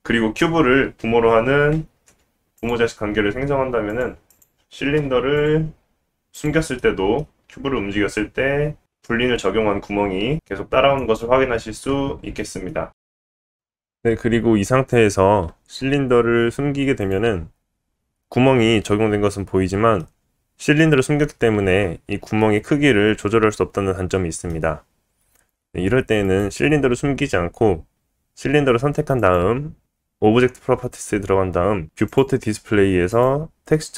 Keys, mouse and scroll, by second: 1.7 ctrl+p, 3.9 click, 4.3 click, 5.3 click, 6.3 click, 6.8-7.7 middle drag, 7.7 g, 10.7-17.0 middle drag, 17.0 click, 17.1-24.7 middle drag, 25.4 middle click, 26.2-28.7 drag, 29.2 click, 31.7 click, 32.4-33.9 drag.